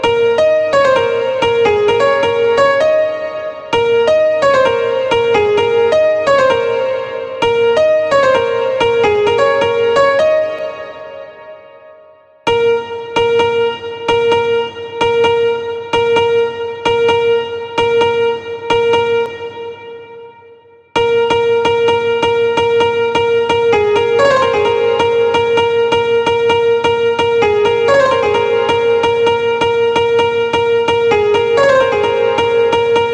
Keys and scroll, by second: 10.0 space, 11.8 space, 19.1 space, 20.3 space.